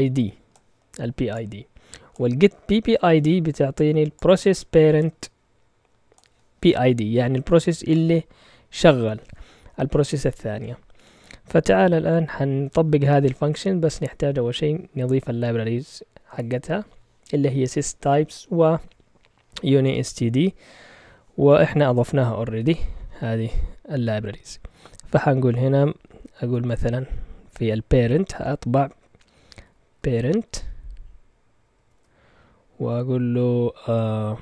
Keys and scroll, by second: 22.6 ctrl+Tab, 28.7-30.9 typing, 31.9 typing.